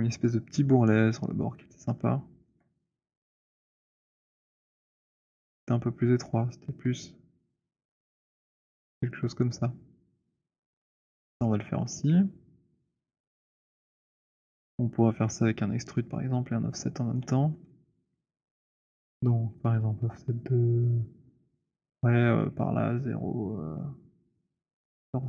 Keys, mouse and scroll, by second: 1.1 click, 2.5 alt+middle click, 3.5 r, 10.4 click, 10.9 w, 13.0 right click, 13.7 click, 14.1 shift+click, 14.5 shift+click, 17.2 shift+right click.